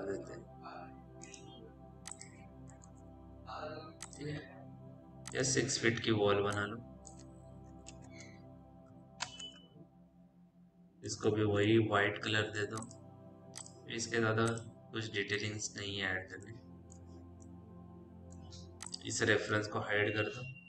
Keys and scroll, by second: 3.4 p, 7.8 ., 8.7 KP_8, 9.1 Return, 11.5 m.